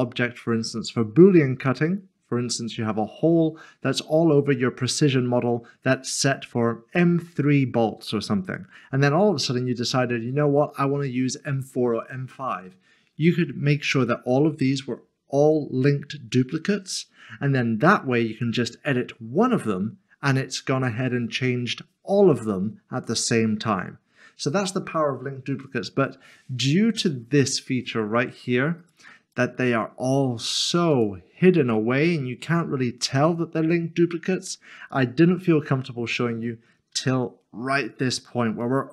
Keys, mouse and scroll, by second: 2.9 middle click, 8.5 middle click, 14.0 middle click, 17.8 middle click, 28.8 click, 34.9 click, 35.5 middle click, 38.0 shift+middle click, 38.6 middle click.